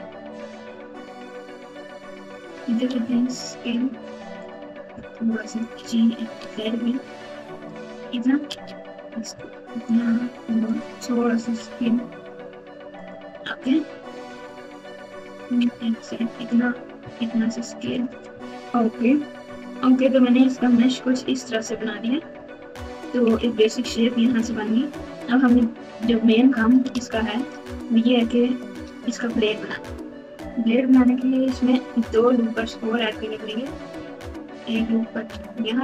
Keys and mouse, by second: 3.0 s, 5.8 g, 8.5 e, 11.4 s, 14.2 e, 17.0 s, 19.4 KP_Multiply, 20.7-23.4 typing, 24.4-25.2 ctrl+KP_8, 25.5-26.2 KP_Subtract, 26.9-27.5 KP_Add, 28.4 ctrl+KP_8, 28.9 KP_8, 29.7 Tab, 33.2 ctrl+r.